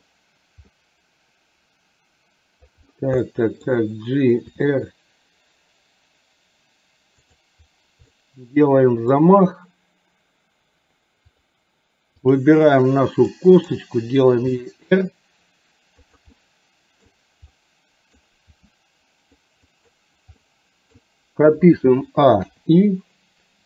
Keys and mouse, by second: 0.8-2.7 middle drag, 3.3 middle click, 4.6 r, 8.2 middle click, 12.4 click, 13.5 middle click, 14.6 r, 16.4 middle click, 17.6 middle click, 18.6 r, 20.5 middle click, 22.4 i.